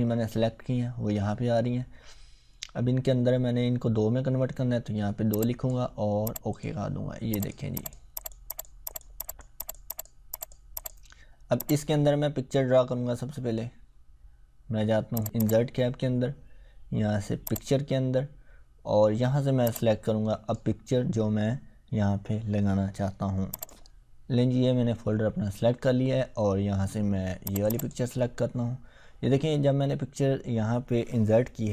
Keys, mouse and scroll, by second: 5.3-6.0 click, 15.2-20.6 drag, 23.5 click, 27.4 click.